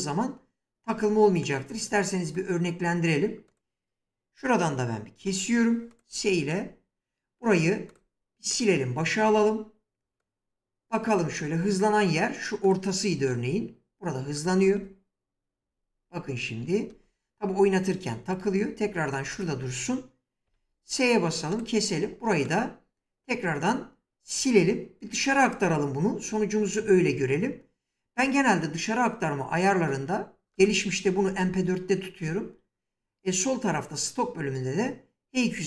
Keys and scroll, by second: 5.0 s, 14.4 space, 16.7 space, 20.3 s.